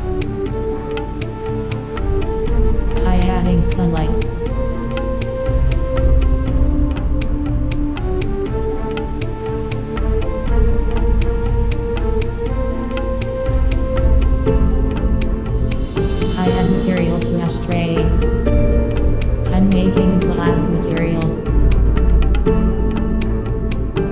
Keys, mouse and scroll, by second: 0.0 Escape, 0.7 shift+a, 4.4 KP_1, 4.7 KP_5, 5.2 KP_5, 6.2 r, 7.1 click, 7.2 g, 8.2 KP_7, 9.6 r, 11.3-13.9 drag, 11.5 g, 12.7 KP_0, 13.1 ctrl+s, 14.3-16.0 right drag, 15.6 click, 16.1-19.0 drag, 21.4 click, 22.5-24.1 middle drag.